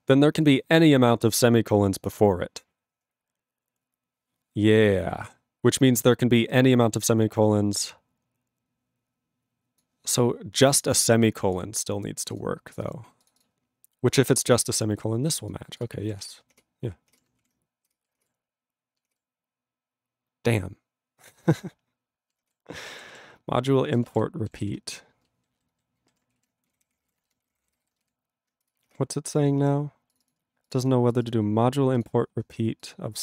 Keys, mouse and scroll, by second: 0.4 click, 1.1 click, 2.1-3.4 scroll up 2, 4.9 click, 5.7 click, 6.5 click, 9.8 click, 11.5 click, 11.6 click, 12.2 click, 12.2 click, 12.3 double click, 12.4 double click, 12.7 click, 12.8 click, 12.9 double click, 13.2 click, 13.3 click, 13.4 double click, 13.4 double click, 14.6 click, 15.5 click, 15.8 click, 15.8 click, 16.2 ctrl+s, 18.3 ctrl+s, 22.6 ctrl+s, 23.8 ctrl+a, 24.0 ctrl+space, 24.0 ctrl+e, 24.1 ctrl+g, 24.6 ctrl+s, 25.5 alt+b, 26.4 ctrl+s, 26.4-28.2 typing, 28.2 ctrl+s, 28.7 Return.